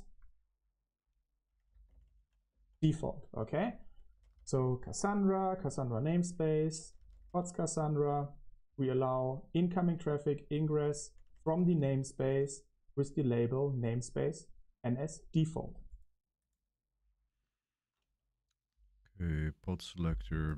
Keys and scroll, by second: 0.0-14.7 typing.